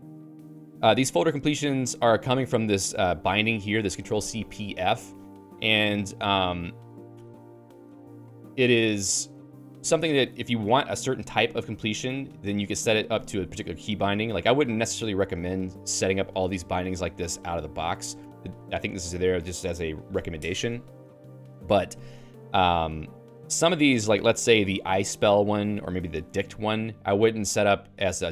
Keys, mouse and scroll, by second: 1.9-3.8 typing, 13.4-17.5 typing, 18.2 Escape, 22.1-26.8 typing.